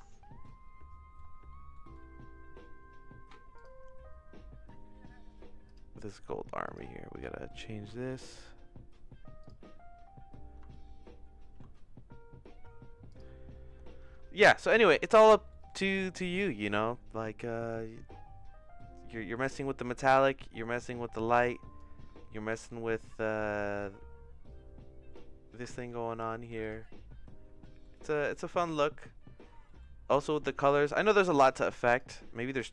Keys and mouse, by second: 0.1-1.1 shift+middle drag, 1.7 middle click, 5.6 click, 6.6 click, 10.7 shift+middle click, 13.1 click, 15.5 middle click, 16.0 middle click, 17.7-21.8 drag, 22.5 ctrl+s, 23.1 middle click, 23.8-25.1 drag, 25.7 shift+middle click, 26.6 click, 27.6 middle click, 28.3 shift+middle click, 29.7 middle click, 30.2 middle click, 30.9 middle click, 31.9 click.